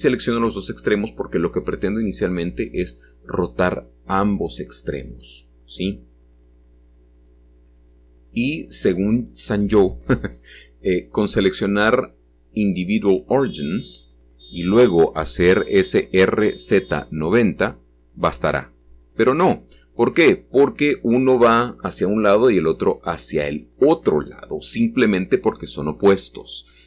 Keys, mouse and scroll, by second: 0.2-1.7 scroll down 1, 1.7-2.5 scroll down 1, 2.5 scroll down 1, 2.7 7, 8.1-10.8 scroll up 1, 10.8 scroll up 1, 11.9-13.0 drag, 13.6 click, 13.9 click, 16.0 r, 21.4 r, 24.3 Escape, 25.8 click, 26.2 click.